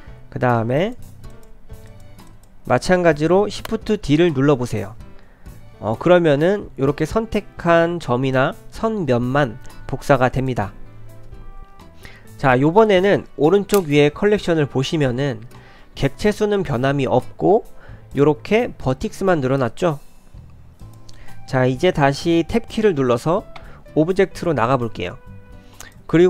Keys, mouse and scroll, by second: 0.0 click, 0.0 2, 0.0 3, 0.4 1, 0.8 click, 1.3 shift+click, 1.9 click, 6.3 shift+d, 11.6 click, 12.4 click, 20.8 click, 23.6 Tab, 25.8 click.